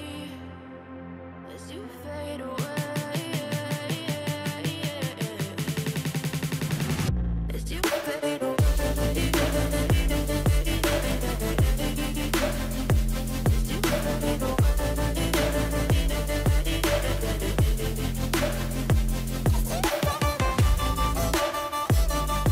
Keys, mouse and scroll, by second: 0.0-2.6 typing, 3.7 BackSpace, 4.2 BackSpace, 4.4 i, 8.4 double click, 17.3 ctrl+j, 17.7 ctrl+click, 19.4 double click, 20.6-22.3 typing.